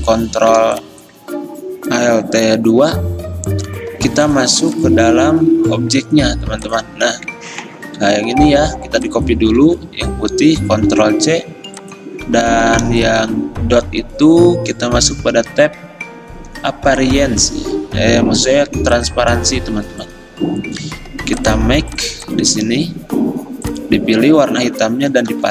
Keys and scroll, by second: 9.7 ctrl+z, 11.0 ctrl+c, 25.4 ctrl+v.